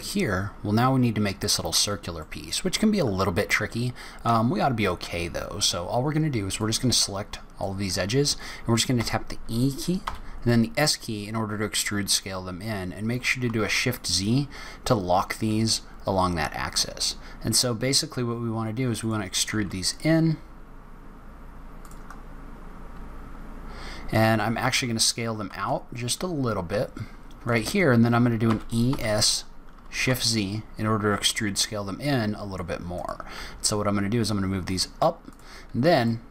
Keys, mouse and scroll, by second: 2.1 middle click, 2.9-3.7 scroll up 1, 3.7-4.7 scroll down 2, 4.1-4.7 scroll up 1, 4.7 scroll up 2, 6.5 click, 8.9 e, 22.1-22.5 scroll down 4, 22.4-23.3 scroll up 4, 24.6 s, 33.2 g, 35.6-35.9 scroll up 3, 35.9 middle click.